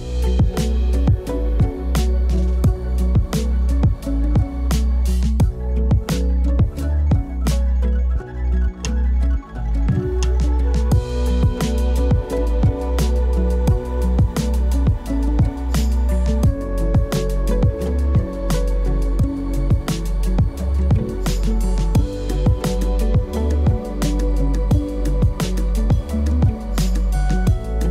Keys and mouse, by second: 1.0 click, 1.4 KP_Decimal, 3.1 alt+shift+z, 3.7 shift+s, 5.2-5.8 alt+drag, 6.4 KP_Decimal, 7.1 ctrl+middle drag, 7.7 alt+shift+z, 9.0 alt+shift+z, 9.2 alt+shift+z, 9.9 alt+shift+z, 10.4 click, 10.9 click, 12.6 g, 16.5 click, 16.8 click, 19.5 click, 20.7 shift+d, 21.0 click, 21.7 click, 21.9 click, 25.6 space, 26.2 click, 27.0 KP_0, 27.8 alt+shift+z.